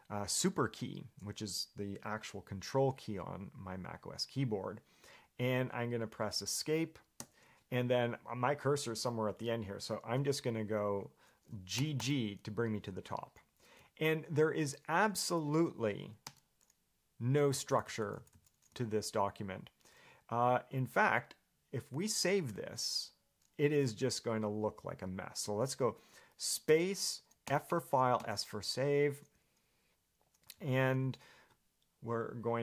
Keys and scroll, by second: 7.4 Escape, 14.0-14.8 j, 16.4 0, 17.5-20.0 typing, 30.7 j, 31.2 k.